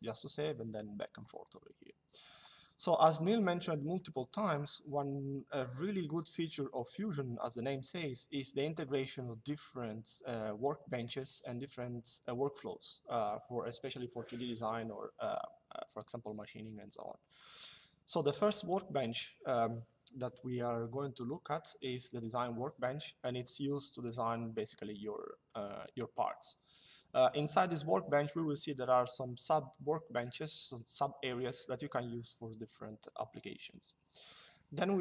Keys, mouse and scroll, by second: 10.8 click.